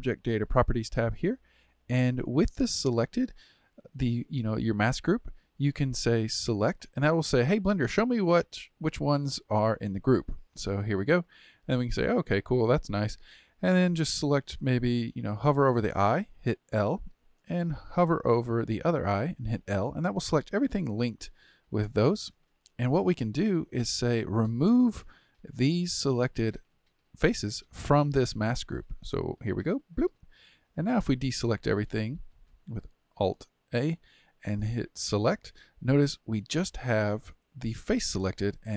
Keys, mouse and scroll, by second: 0.5 click, 6.6 click, 7.5-10.5 middle drag, 13.8 click, 16.5 l, 19.4 l, 20.7-23.7 middle drag, 29.8-32.7 drag, 32.7 alt+a, 35.1 click, 36.0-38.7 middle drag.